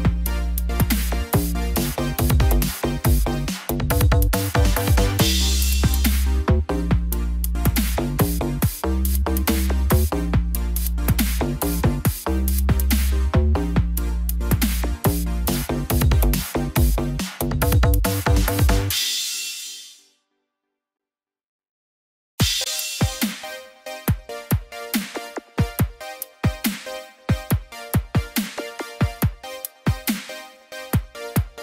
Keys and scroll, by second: 10.7 ctrl+=.